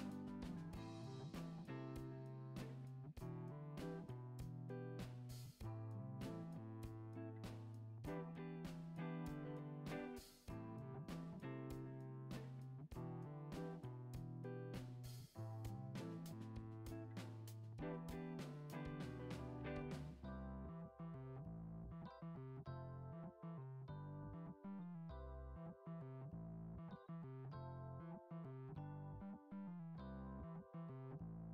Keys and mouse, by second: 2.3-2.6 shift+drag, 2.8 shift+click, 3.2 middle drag, 3.6 g, 8.7 middle click, 9.5-10.2 middle drag, 10.3 e, 14.9 click, 15.9 shift+middle click, 16.4 middle click, 17.4 shift+d, 18.6 p, 19.2 Tab, 20.5 Tab, 21.3 click, 22.5 x, 24.0 ctrl+x, 24.9 a, 26.1 middle click, 26.5 g, 28.9 shift+middle drag, 29.2 middle click, 29.7 ctrl+r, 29.8 ctrl+z.